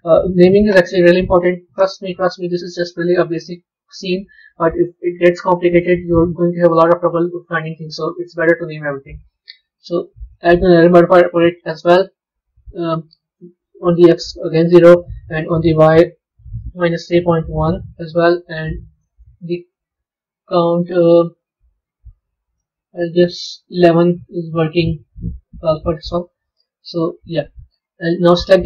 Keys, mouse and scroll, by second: 8.7-11.7 drag, 13.2-14.7 drag, 14.8-17.9 drag, 18.8 click, 21.1-23.0 middle drag, 23.0-24.1 drag, 24.1-27.2 middle drag, 27.2 click, 28.3 click.